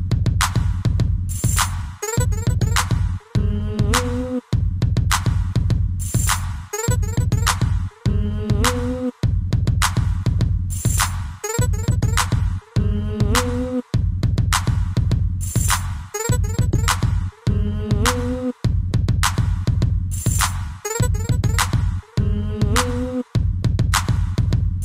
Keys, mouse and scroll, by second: 0.0 click, 0.1 click, 0.6 middle click, 1.5 shift+middle click, 1.8 middle click, 2.2 middle click, 3.2 scroll up 2, 3.7 shift+middle click, 4.7 click, 4.8 click, 5.8 click, 6.8 scroll down 2, 7.4 Down, 8.0 shift+space, 8.6 Escape, 10.2 shift+middle click, 10.4 middle click, 10.8 middle click, 11.7 click, 14.4 shift+middle click, 14.9 scroll up 3, 15.6 shift+middle click, 17.2 click, 23.1 scroll up 1, 23.9 c.